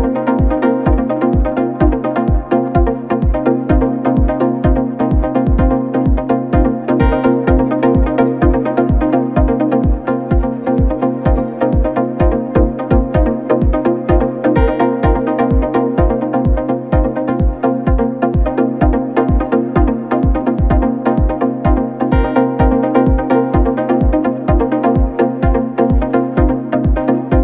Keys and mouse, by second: 5.7 click, 6.2-8.4 right drag, 8.4 click, 9.1 right click, 10.2 click, 10.6-13.6 right drag, 14.9 click, 17.4 click, 17.9 click, 19.4-22.5 drag.